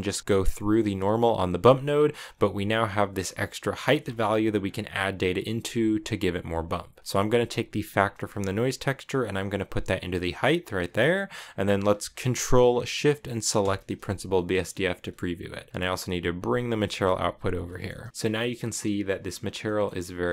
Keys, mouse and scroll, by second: 2.1 click, 3.1-4.4 drag, 7.7 click, 10.7 scroll down 4, 10.9-13.4 middle drag, 13.4 ctrl+shift+click, 14.1 middle click, 14.5-15.5 scroll up 1, 15.5 scroll up 1, 16.1-17.4 drag, 17.4 middle click, 17.6-18.0 scroll up 1, 18.0-19.2 shift+middle drag, 19.4-20.3 middle drag.